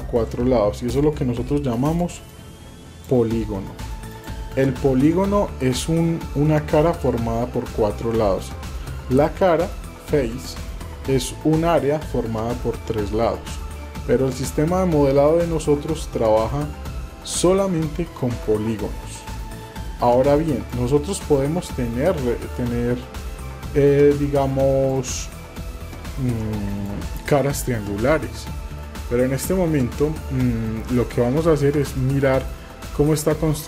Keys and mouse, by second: 1.8 click, 2.3 click, 4.1 click, 17.9-20.8 ctrl+drag, 20.9 click, 21.9-25.0 ctrl+drag, 28.8 middle click, 30.5 middle click, 31.0 shift+middle click, 31.9 middle click, 33.2 shift+middle click.